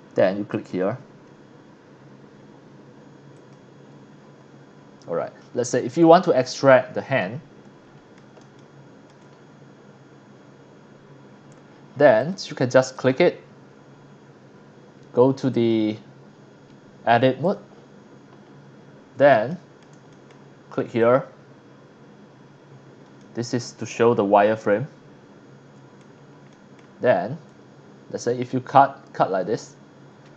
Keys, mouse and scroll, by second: 0.3 click, 3.3 click, 4.4 middle click, 4.4 scroll down 1, 4.8 scroll up 1, 7.2-8.2 middle drag, 8.5-9.1 shift+middle drag, 9.3 scroll up 1, 9.6 scroll down 1, 10.1 middle click, 12.2 click, 12.9 click, 15.5 click, 17.4 click, 18.4 scroll up 1, 19.5 shift+middle click, 20.1 middle click, 21.0 click, 23.2-26.0 middle drag, 26.5 middle click, 27.5-29.6 drag.